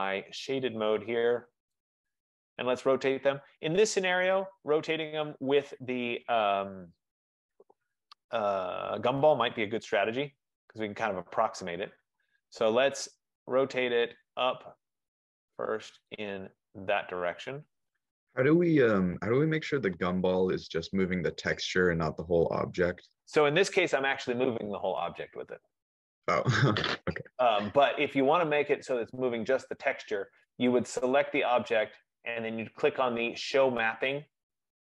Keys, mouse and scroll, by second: 0.7 click, 2.6 right click, 2.9 middle click, 5.5 click, 9.7 click, 11.3 middle click, 11.5 middle click, 18.1 click, 21.1 click, 22.6 ctrl+z, 26.5 right click, 28.4 right click, 31.3 F15, 31.4 click.